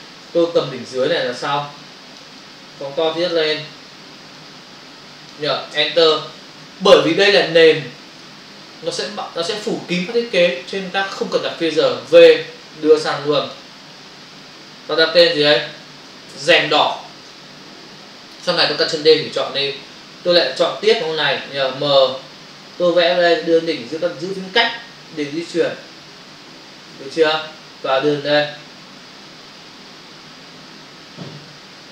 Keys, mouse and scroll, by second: 0.2 space, 0.3 click, 0.5 space, 1.7 click, 2.3 ctrl+click, 4.4 click, 5.7 Return, 6.1 ctrl+o, 7.8 ctrl+f, 9.2 f, 9.6 ctrl+-, 11.9 v, 12.7 click, 15.2 click, 15.5 click, 15.6 double click, 16.3-16.8 typing, 17.3 Return, 18.3 click, 20.3 ctrl+click, 22.1 m, 22.7 click, 23.2 space.